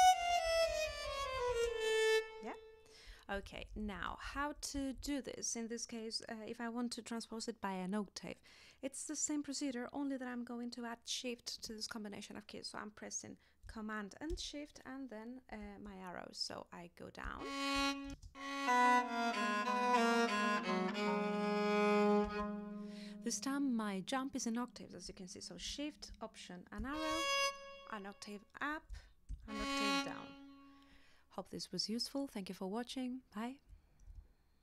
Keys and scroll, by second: 3.4 super+z, 17.2 alt+shift+Down, 18.1 alt+shift+space, 18.8 space, 22.2 space, 26.8 alt+shift+Up, 29.3 alt+shift+Down.